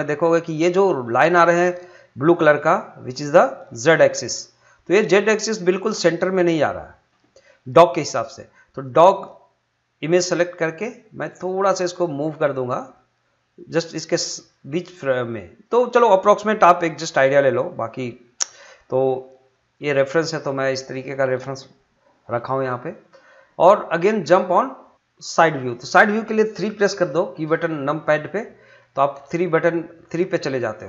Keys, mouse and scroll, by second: 10.8 click, 11.2-16.6 drag, 16.6-21.9 drag.